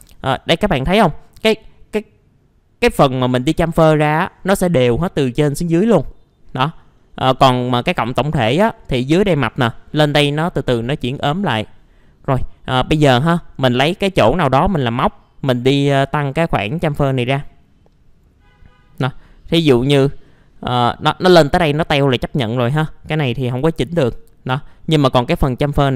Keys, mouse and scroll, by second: 0.8-1.3 scroll down 1, 1.3 middle click, 3.3-5.6 scroll up 1, 5.8-6.9 middle drag, 7.0-7.9 scroll down 2, 7.3 middle click, 12.5 scroll up 1, 13.4 middle click, 16.0-19.8 drag, 19.8 middle click, 21.7-23.2 scroll down 1, 23.2 middle click, 23.7 alt+middle click, 24.8 scroll up 1, 25.0 middle click, 25.6-25.9 drag.